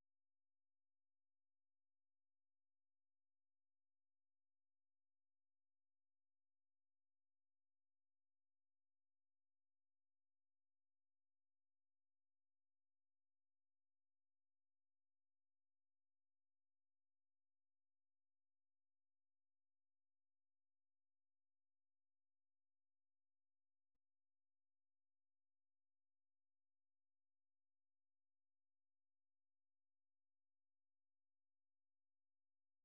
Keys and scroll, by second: 2.6 ctrl+[, 2.8-11.7 typing, 3.8 ctrl+v, 13.2-13.8 typing, 15.0 k, 19.8 ctrl+c, 20.8 super+1, 22.0 o, 22.8 ctrl+v, 23.3-26.7 typing, 25.8 ctrl+[, 28.2-29.0 typing, 31.3 j.